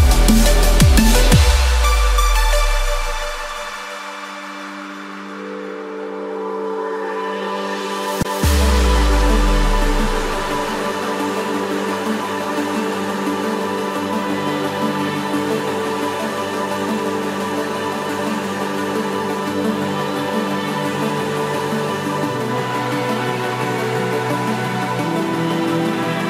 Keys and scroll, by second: 2.9 ctrl+-, 13.6 ctrl+z, 16.9 ctrl+=.